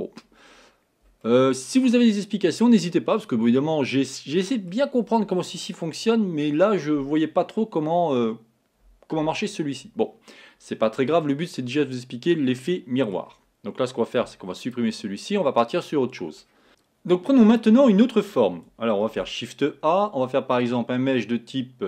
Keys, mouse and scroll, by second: 1.2-3.1 middle drag, 3.1-3.6 scroll down 2, 3.6-6.6 middle drag, 11.2-14.3 middle drag, 14.3 x, 15.6-16.7 middle drag, 19.2 shift+a.